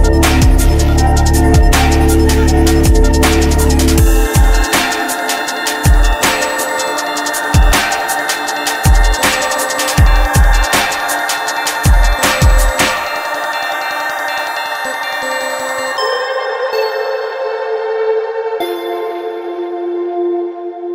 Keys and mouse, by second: 1.7-5.4 middle drag, 5.4-6.7 drag, 11.8-13.1 middle drag, 15.0 middle click, 15.7 right click, 17.6 right click, 18.6 middle click, 18.9 click.